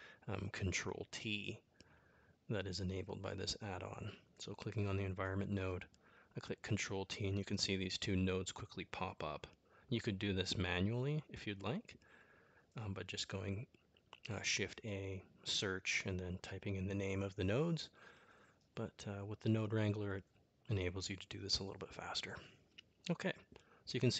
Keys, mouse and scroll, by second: 1.2 middle click, 2.4 click, 4.3 ctrl+t, 6.2-8.2 middle drag, 12.7-17.8 drag, 19.6-22.2 drag.